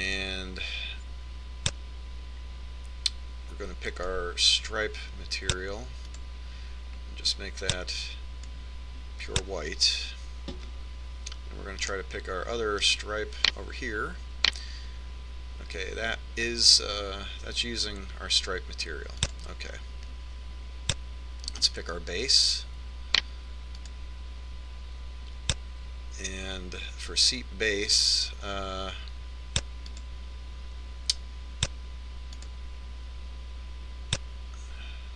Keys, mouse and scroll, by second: 1.6-3.2 drag, 7.6-9.3 drag, 13.4 right click, 19.1-21.0 drag, 23.1-24.8 right drag, 25.4-27.1 drag, 29.5-31.1 drag, 34.0-35.1 drag.